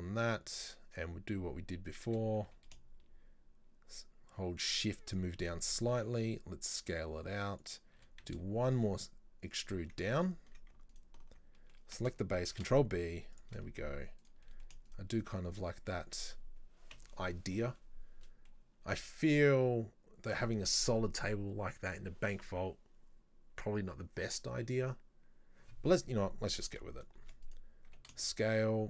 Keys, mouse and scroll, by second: 2.1 e, 6.0 s, 10.2 alt+right click, 11.0 alt+right click, 11.6 middle click, 12.5 ctrl+b, 13.7 middle click, 14.3 right click, 14.5 middle click, 14.9 shift+right click, 15.2 shift+right click, 15.5 shift+right click, 17.8-20.9 middle drag, 26.1-27.3 middle drag, 27.3 shift+d, 27.9 s.